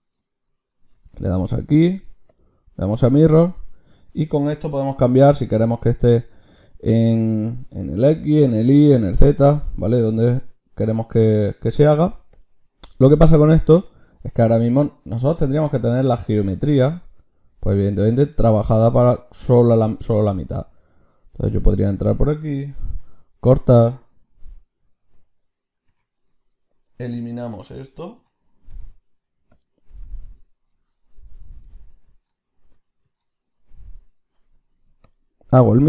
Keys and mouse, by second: 0.8 ctrl+shift+q, 4.6-7.7 drag, 13.8-21.4 drag, 21.4 Tab, 22.7 ctrl+r, 25.8 v, 26.4-28.2 drag, 28.2 l, 28.6 x, 29.8 Tab, 31.3-33.6 drag, 33.6 ctrl+shift+q.